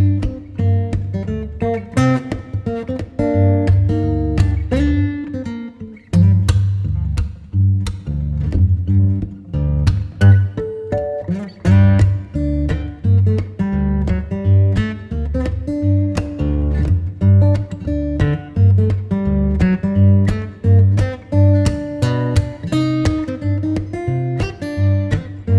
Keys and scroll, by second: 9.6 Return.